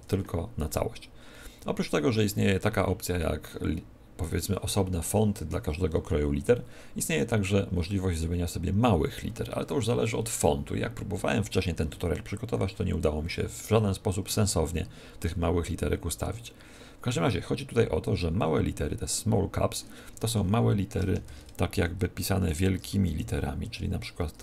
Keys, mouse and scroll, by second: 8.1 click, 20.1 Tab, 20.9-23.0 typing, 24.3 BackSpace.